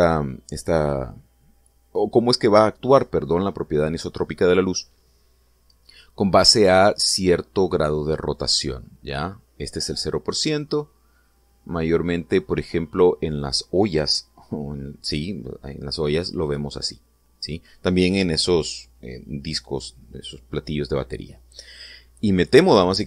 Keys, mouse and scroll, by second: 10.3-13.9 drag.